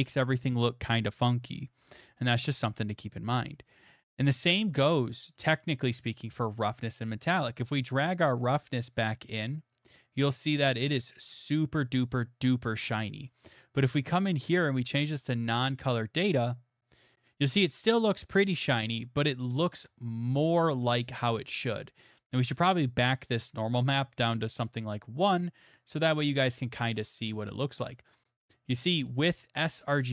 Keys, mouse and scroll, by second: 3.5-4.8 scroll, 5.4-9.5 scroll, 9.5 click, 11.4 middle click, 12.5 middle click, 13.4 middle click, 14.1 click, 19.7 middle click, 19.9 middle click, 19.9 middle click, 19.9 middle click, 20.5 middle click, 22.6 click, 22.8 click, 24.4 KP_1, 26.1 middle click, 26.3 middle click, 26.3 middle click, 27.7 middle click, 29.3 click.